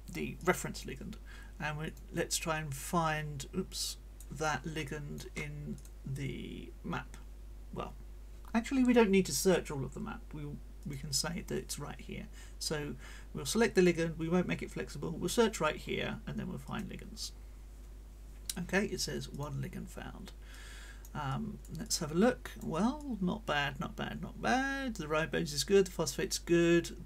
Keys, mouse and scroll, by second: 0.4 click, 1.8 click, 2.3-4.4 drag, 4.8 click, 5.8 click, 10.8 click, 15.8 middle click, 16.6 click, 19.3 click, 20.5 click, 21.8 click, 21.8 right click, 23.0-27.0 drag.